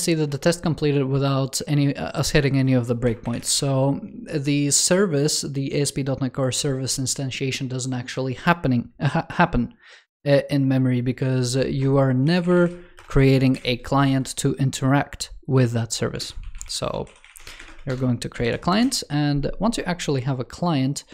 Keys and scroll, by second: 1.3 super+2, 16.0 super+Left, 18.3 super+s.